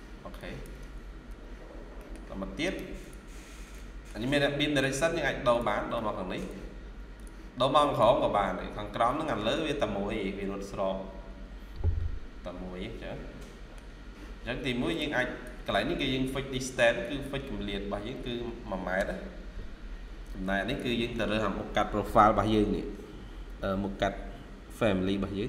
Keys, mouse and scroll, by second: 1.2 Escape, 1.9 middle click, 2.5 right click, 3.3-3.6 scroll down 1, 3.6 shift+middle click, 8.3 scroll up 1, 9.0 middle click, 12.7-13.2 scroll down 1, 13.3 middle click, 15.0 double click, 16.9 double click, 18.1-18.6 typing, 18.8 Return, 22.6-25.4 scroll up 1.